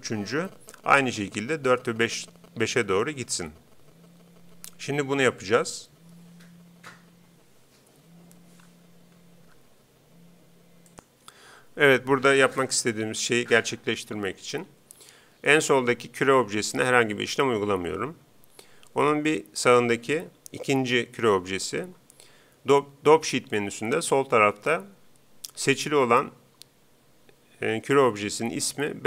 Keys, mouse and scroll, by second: 19.6-21.4 right drag.